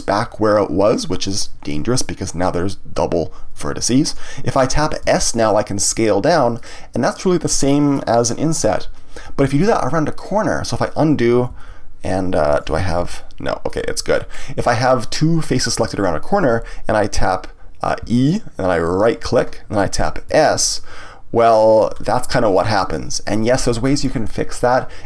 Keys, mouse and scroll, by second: 6.6 click, 7.1-9.4 middle drag, 9.4 ctrl+z, 12.9 g, 13.7 right click, 14.1-15.4 middle drag, 15.4 shift+click, 18.0 e, 19.1 right click, 20.3 s, 21.7 click, 22.0-25.0 middle drag.